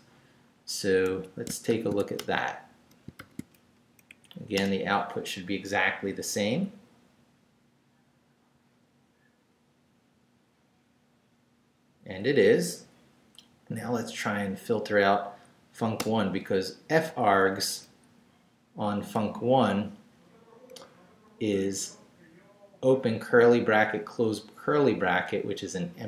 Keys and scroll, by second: 1.1 Escape, 1.7 shift+;, 2.0 shift+w, 2.2 Return, 3.0 shift+Return, 3.2 shift+;, 3.7 shift+Up, 4.5 Return, 16.0 Return, 17.3 Down.